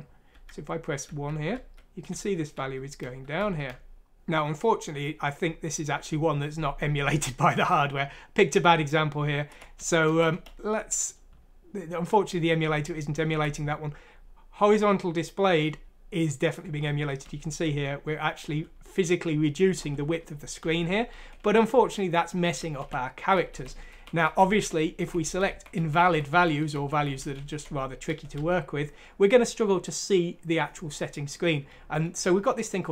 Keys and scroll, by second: 0.3-5.2 typing, 9.3 typing, 12.5-13.2 typing, 15.6-28.3 typing, 29.6-30.3 typing.